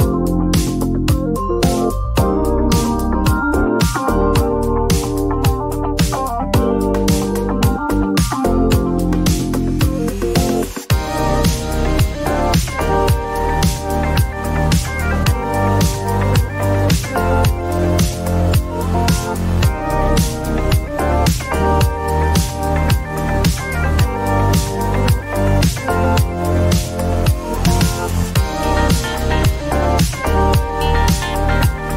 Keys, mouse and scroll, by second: 0.4 typing, 1.6 click, 3.0-3.4 typing, 6.4 click, 7.3 click, 7.3 typing, 7.6 Return, 10.6 click, 12.0-12.8 typing, 15.6 click, 16.6-17.1 typing, 19.7 alt+click, 21.6 alt+click, 22.9-25.1 typing, 28.5 alt+click, 30.2-31.9 typing, 30.8 alt+click.